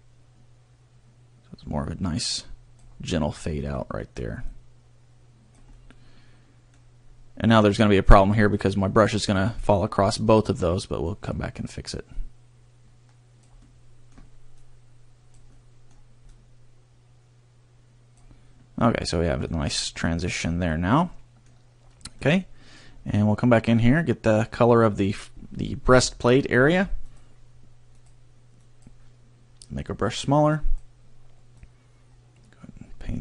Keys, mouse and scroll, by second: 3.8 middle click, 4.6 click, 5.8 middle click, 11.0 click, 13.6 middle click, 14.6 click, 15.4 middle click, 16.4 click, 18.9 middle click, 19.7 scroll, 20.1 middle click, 22.9 scroll, 23.3 middle click, 27.0 click.